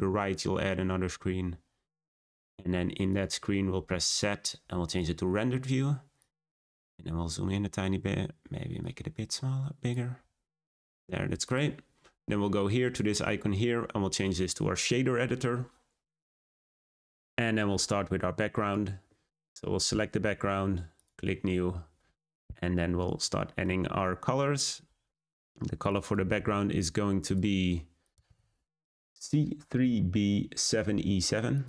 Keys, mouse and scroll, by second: 3.0 click, 3.8 z, 6.1 click, 6.8 scroll up 2, 7.8 scroll up 1, 8.7-11.5 drag, 13.2-15.0 drag, 15.1-18.7 drag, 21.0-30.8 drag.